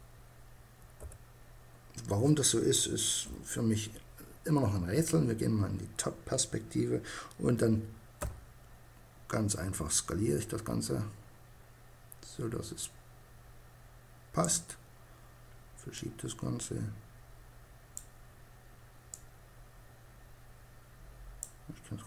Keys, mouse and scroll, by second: 0.0 Escape, 2.2 KP_7, 7.2 s, 13.5-16.7 drag, 18.2-19.9 drag.